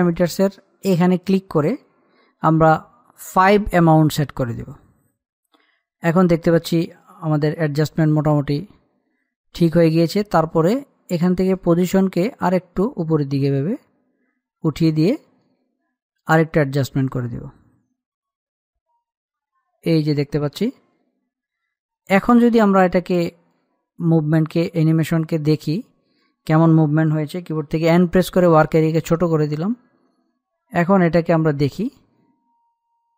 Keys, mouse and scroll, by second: 0.6 click, 12.2-15.2 drag, 15.2-15.8 scroll up 1, 15.8 middle click, 16.8-17.2 scroll up 1, 17.2-19.0 middle drag, 19.0-21.4 drag, 21.4-23.6 scroll down 1, 24.2-28.6 drag, 28.6 n, 31.2 click.